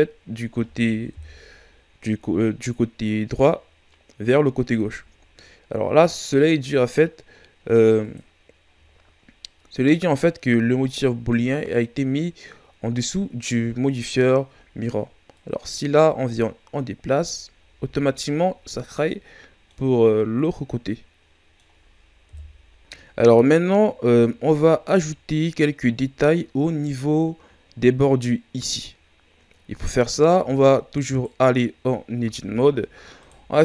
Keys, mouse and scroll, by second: 1.1 KP_1, 8.0-11.0 drag, 15.3-17.6 drag, 17.6 a, 18.6 ctrl+scroll down 4, 19.0-22.2 middle drag, 22.2 KP_1, 22.6 scroll down 2, 26.2-29.4 scroll up 2, 31.0 right click, 32.1 Tab, 33.1-33.6 right drag.